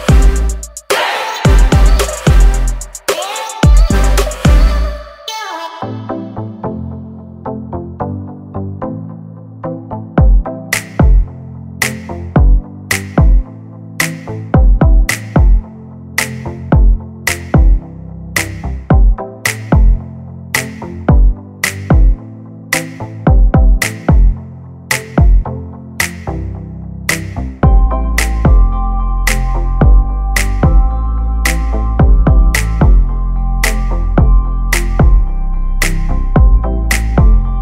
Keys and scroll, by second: 0.5 r, 1.5-3.4 typing, 12.5 space, 13.3 m, 15.2 space, 15.5 p, 16.2 5, 16.4 Return, 16.7 space, 28.6 p, 31.0 space, 31.2 e.